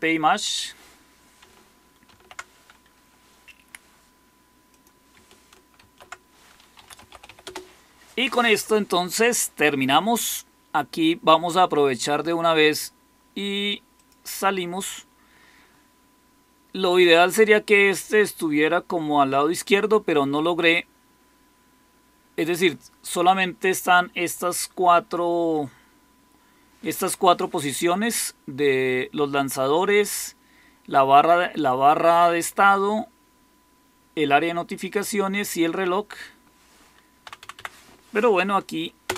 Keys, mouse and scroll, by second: 2.0 ctrl+c, 5.2 ctrl+click, 5.7 ctrl+x, 6.5-7.7 typing, 37.1 Down, 37.3 Down, 37.5 Down, 39.0 Return.